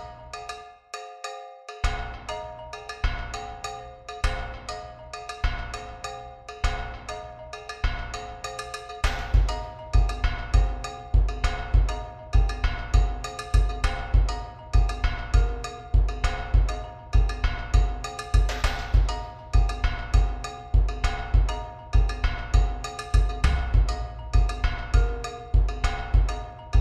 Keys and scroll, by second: 13.6 b.